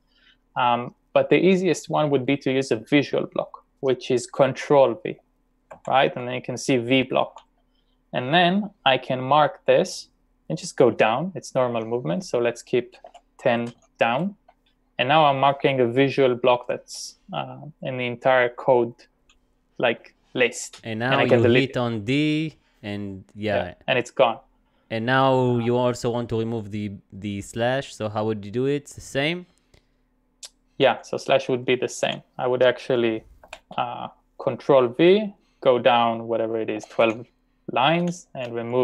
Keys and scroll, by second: 5.8 ctrl+v, 9.0-11.2 typing, 13.1-14.3 typing, 21.3 d, 32.1 h, 33.5 ctrl+\, 36.6-37.6 typing.